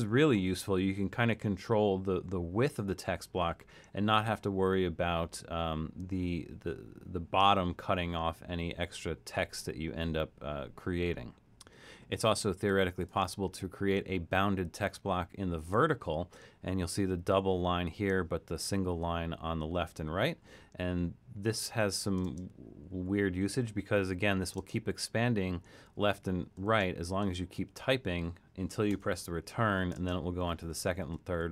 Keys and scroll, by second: 0.0-0.4 typing, 20.2-27.7 typing, 28.9 Return, 29.2-31.5 typing.